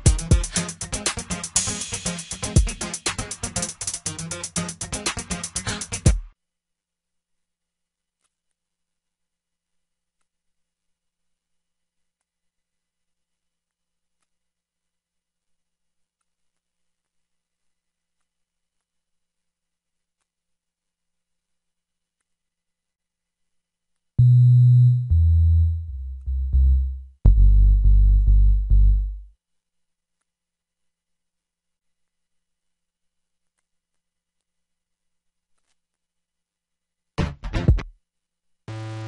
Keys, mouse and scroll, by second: 8.5-9.0 drag, 10.3 click, 11.3 click, 17.0 ctrl+l, 36.3 typing.